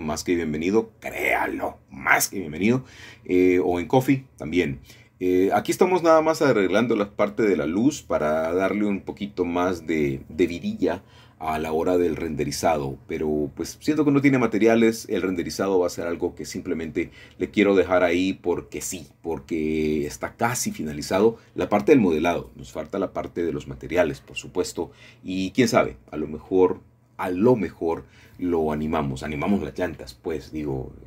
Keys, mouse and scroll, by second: 1.6 shift+d, 4.5 click, 6.3 shift+d, 9.8 click, 10.6 g, 11.2 z, 13.3 click, 13.6 click, 13.8 click, 14.3 middle click, 14.6-15.3 scroll down 1, 15.6-16.6 shift+middle drag, 18.9 g, 21.3 click, 22.9 middle click, 23.6 g, 24.1 z, 25.5-26.6 drag, 26.7 g, 27.6-28.6 drag, 29.2-31.0 middle drag, 29.9 KP_0.